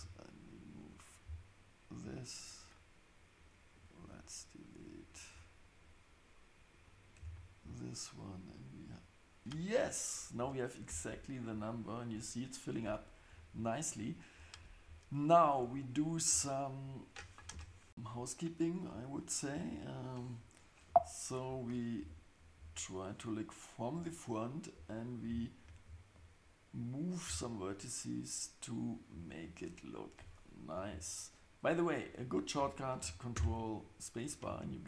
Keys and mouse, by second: 5.1 shift+click, 5.8 shift+click, 7.2 x, 10.9 Tab, 17.5 KP_7, 21.6 click, 22.0 KP_1, 22.6 KP_3, 33.4 ctrl+space.